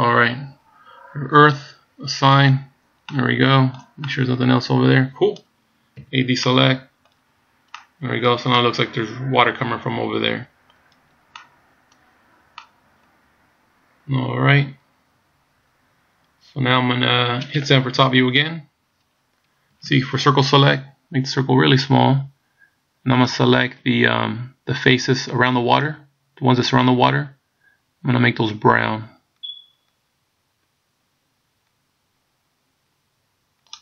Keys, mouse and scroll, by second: 1.4 click, 2.4 click, 3.1 middle click, 4.1 middle click, 6.1 a, 6.5 middle click, 7.4 scroll down 2, 7.8 middle click, 8.7 middle click, 11.0 scroll down 2, 11.4 middle click, 12.7 middle click, 17.2 scroll down 1, 18.0 KP_7, 19.8 c.